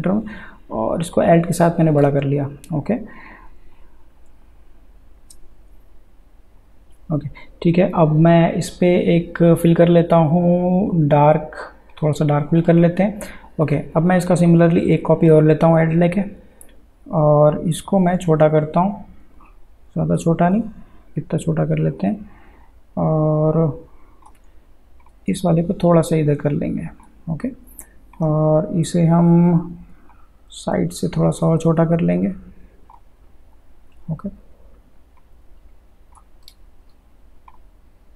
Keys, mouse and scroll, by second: 6.6 click, 9.3 click, 11.9-18.3 drag, 18.3-35.2 alt+shift+drag, 35.2-36.8 drag, 36.8 ctrl+z, 37.5-38.1 drag.